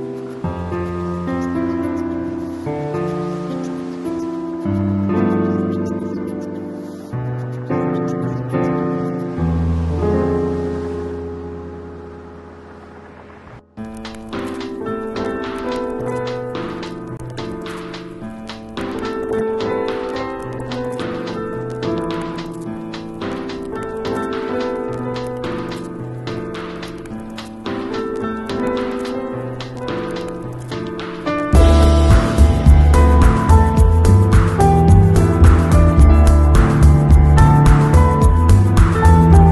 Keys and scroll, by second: 2.4 d, 2.7 shift+super+n, 3.0 shift+super+Return, 3.5 shift+Return, 3.8 alt+Delete, 4.0 alt+super+d, 4.1 super+v, 4.8 super+], 5.5 alt+super+], 8.0 shift+super+e, 12.4 super+a, 12.7 shift+super+c, 12.8 shift+super+v, 13.5 super+v, 14.5 shift+super+a, 30.7 super+j, 38.8 i.